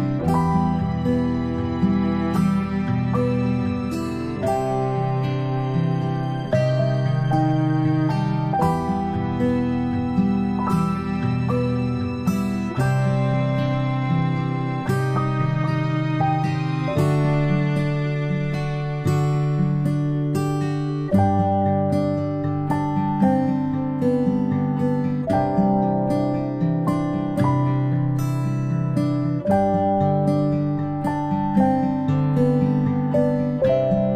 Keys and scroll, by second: 11.1-12.2 ctrl+space, 13.6-14.3 typing, 18.1-19.0 typing, 22.4 space, 22.6-23.2 space, 23.6 space, 30.7 ctrl+space, 30.9 ctrl+space.